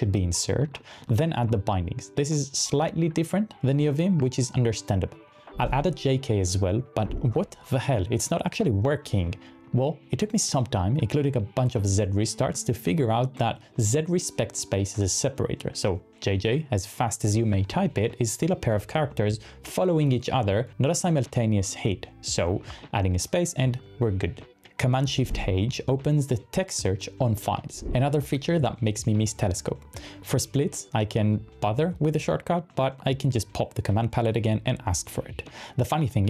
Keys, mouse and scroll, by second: 5.7-7.1 typing, 25.7 shift+super+h, 27.3-28.2 typing.